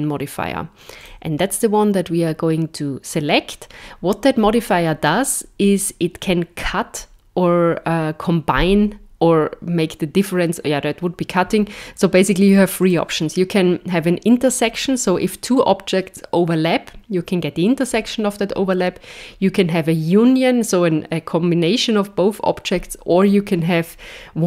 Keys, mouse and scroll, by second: 12.8 click.